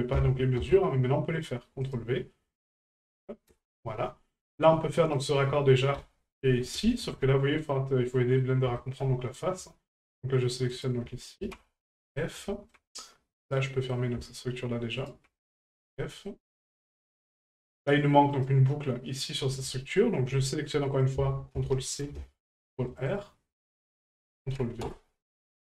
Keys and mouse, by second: 2.7 ctrl+click, 5.0 right click, 8.2 middle drag, 8.8 shift+middle drag, 10.0 shift+right click, 10.7 shift+right click, 12.0 middle click, 12.5 shift+middle drag, 13.4 right click, 13.7 middle drag, 14.9 shift+right click, 16.0 middle click, 17.4 right click, 18.3 right click, 20.9-22.2 ctrl+drag, 24.0 ctrl+click.